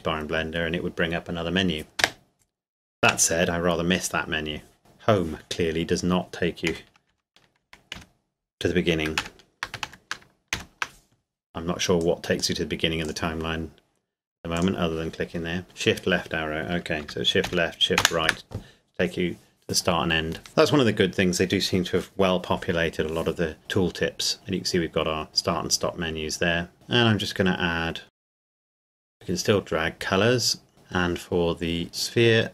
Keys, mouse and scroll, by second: 2.0 space, 3.0 Home, 7.1 Up, 7.6 Down, 7.9 Left, 9.1 ctrl+Up, 9.9 shift+Up, 10.5 Left, 12.0 click, 17.5 shift+Right, 18.0 shift+Left, 26.7 shift+a, 28.1 click, 28.7 scroll up 1, 29.1 click, 29.1 click, 30.7-31.0 scroll down 1.